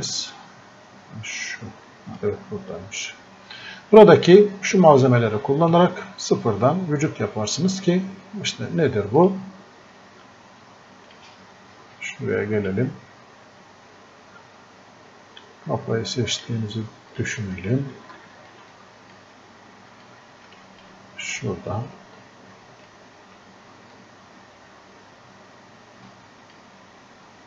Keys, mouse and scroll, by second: 9.2-27.4 drag.